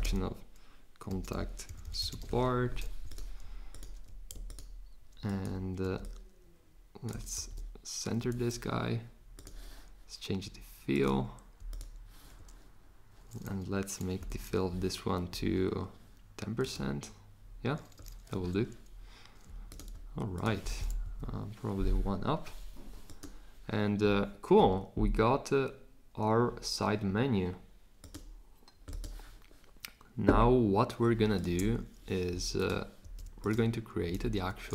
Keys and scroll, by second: 0.0-2.7 typing, 14.2 1, 21.0 Up, 33.0 super+c, 34.1 super+v.